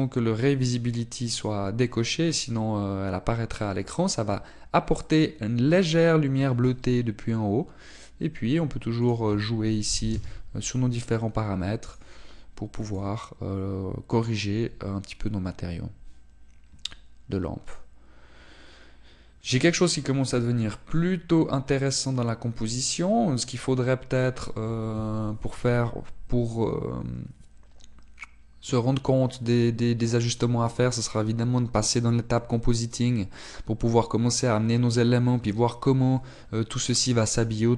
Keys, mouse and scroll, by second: 1.9 click, 11.2 click, 13.0 click, 15.7-16.2 scroll up 1, 33.0-33.7 scroll up 1, 33.7-34.5 scroll down 1.